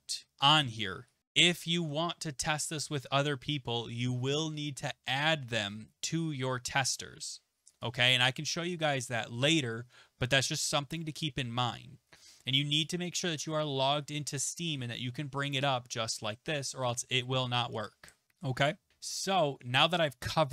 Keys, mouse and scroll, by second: 1.5 click, 7.8 click, 12.8 click, 20.3 click.